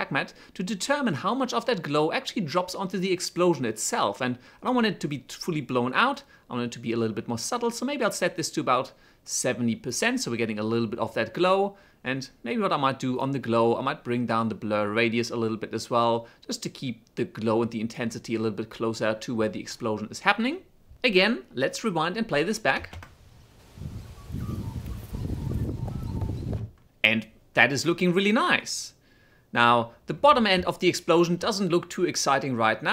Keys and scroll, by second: 21.9 shift+space, 26.7 space, 30.6 space.